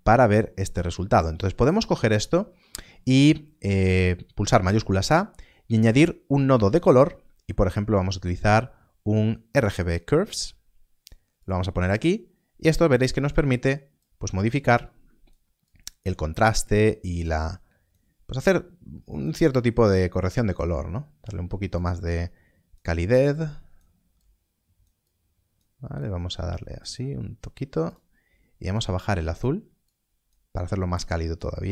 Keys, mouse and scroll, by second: 0.3 click, 1.1 middle click, 9.4 shift+a, 11.2 click, 21.7 click.